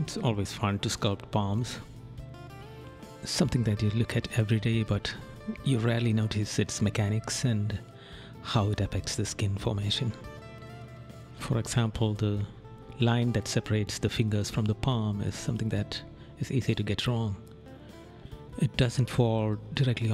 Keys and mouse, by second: 3.1 right click, 5.3 right click, 13.0 right click, 13.8 right click.